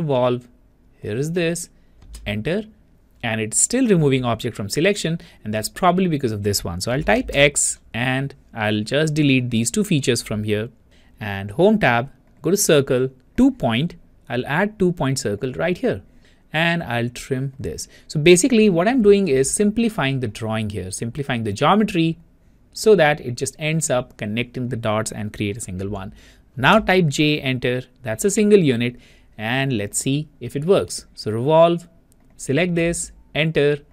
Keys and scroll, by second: 2.2 Return, 7.4 x, 27.1 Return, 27.1 j, 33.3 Return.